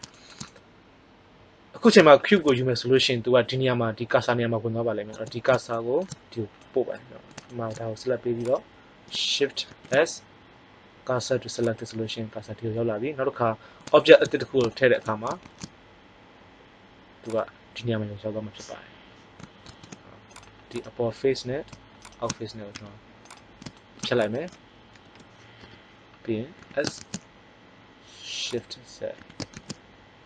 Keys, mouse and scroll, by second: 8.3-10.1 right drag, 9.6 shift+s, 13.5 middle click, 15.3 shift+a, 19.6 ctrl+Tab, 22.7 x, 24.8 ctrl+l, 25.5 KP_1, 26.5 s, 28.4 click, 29.1 s.